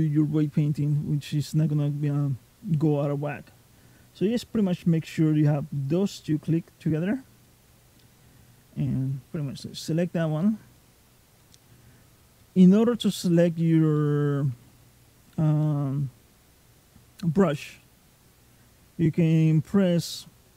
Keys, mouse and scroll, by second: 2.9 middle click, 7.3 middle click, 12.2 middle click, 13.8 shift+middle click.